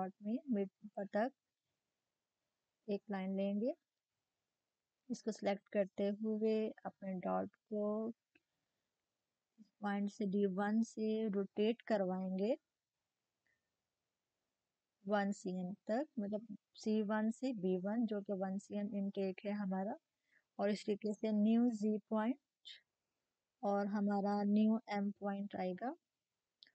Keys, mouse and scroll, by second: 3.9-4.7 typing, 6.1 click, 8.3 click, 12.6 click, 12.6-16.2 drag, 18.1-24.1 drag.